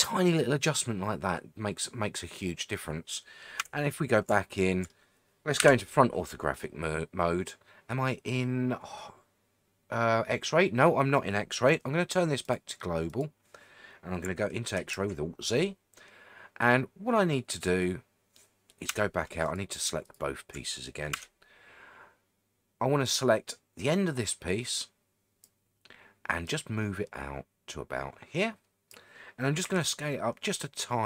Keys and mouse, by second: 3.6 Tab, 4.5 shift+middle click, 5.6 KP_1, 12.4-13.9 drag, 14.8 alt+z, 18.9 Tab, 19.5 click, 21.1 Tab, 23.0-25.4 drag, 26.5-28.9 drag, 29.6 s.